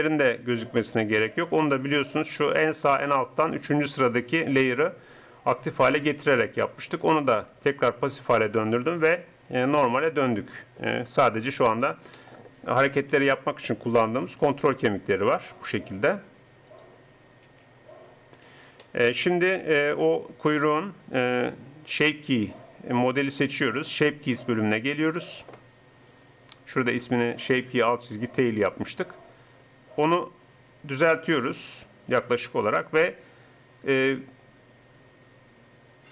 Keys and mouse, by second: 8.0 middle click, 10.2-11.7 middle drag, 13.0 KP_1, 14.6 r, 17.5 r.